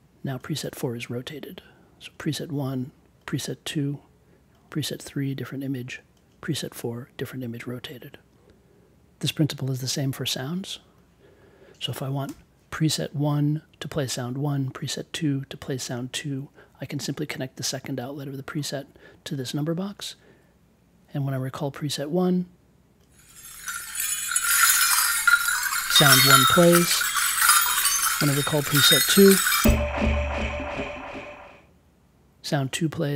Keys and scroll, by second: 12.2 BackSpace.